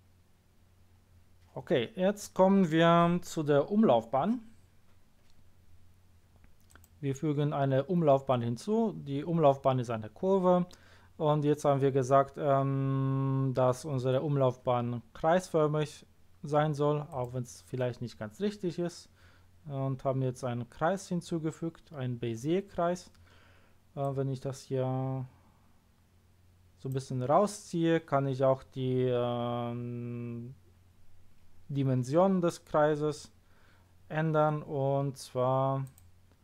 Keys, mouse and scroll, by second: 0.6 scroll down 1, 0.9-1.6 scroll up 1, 6.7 click, 17.1 click, 24.0 click, 35.8 click.